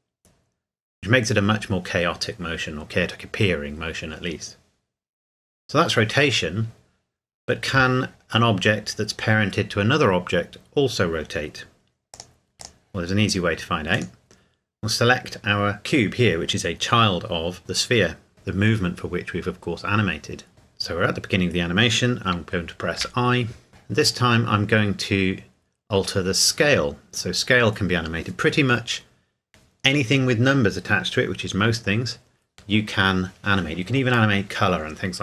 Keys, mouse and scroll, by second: 12.1 click, 13.9 right click.